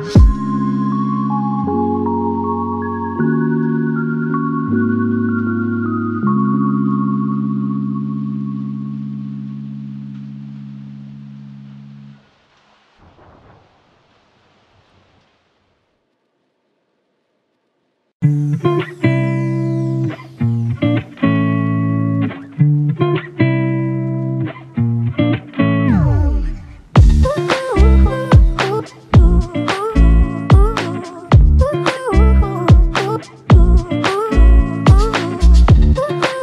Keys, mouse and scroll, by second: 5.8 double click, 6.5 shift+click, 14.5-15.8 typing, 19.4-20.2 typing, 24.0 alt+click, 25.6 alt+click, 32.1-33.4 typing, 35.4 double click.